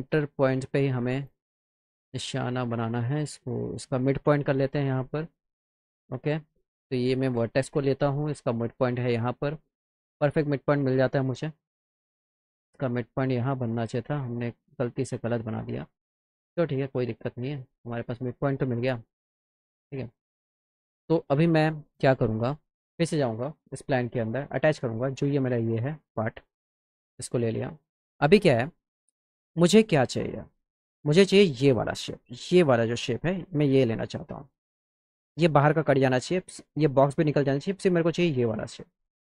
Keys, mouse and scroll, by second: 1.2 click, 2.6 click, 5.8 click, 7.4-9.4 drag, 9.8 middle click, 15.9 middle click, 16.4 middle click, 16.8 middle click, 18.5 click, 19.4 click, 21.2 click, 25.0 click, 26.4 click, 31.6 click.